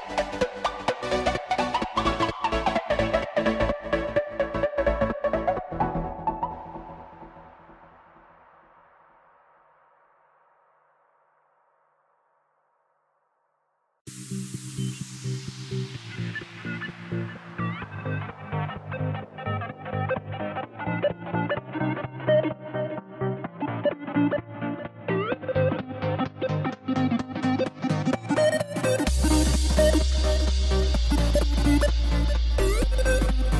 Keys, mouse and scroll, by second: 0.5 click, 2.2-3.1 drag, 3.3 b, 4.3 click, 4.7 b, 6.1 x, 8.4 b, 14.8-15.4 middle drag, 15.4 scroll up 1, 15.8 ctrl+z, 16.3 ctrl+z, 17.3 KP_1, 18.5 e, 20.5 click, 26.3-27.3 middle drag, 27.3 scroll down 3, 27.5-29.0 middle drag, 29.0 KP_1, 29.4 scroll up 3, 31.4 e, 32.7 click.